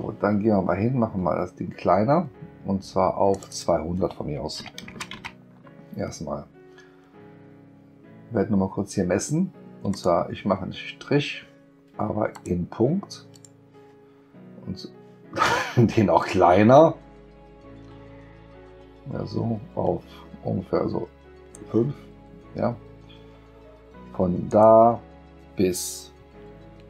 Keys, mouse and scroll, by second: 3.3 click, 3.5 click, 9.9 click, 12.3 click, 13.4 click, 16.2-21.5 drag, 24.5 click.